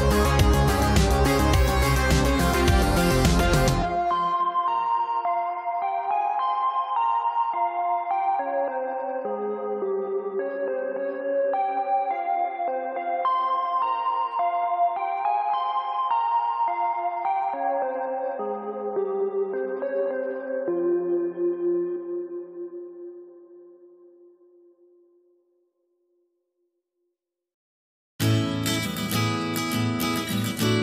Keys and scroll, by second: 21.9 space, 24.2 ctrl+z.